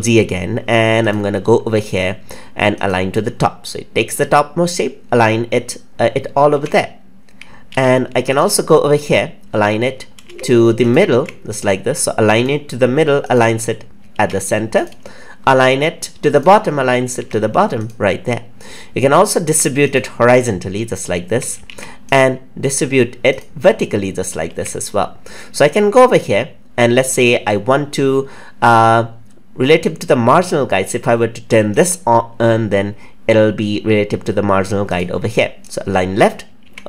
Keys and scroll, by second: 6.5 ctrl+x, 12.4 ctrl+z, 14.1 ctrl+z, 21.6 ctrl+z, 36.5 ctrl+z.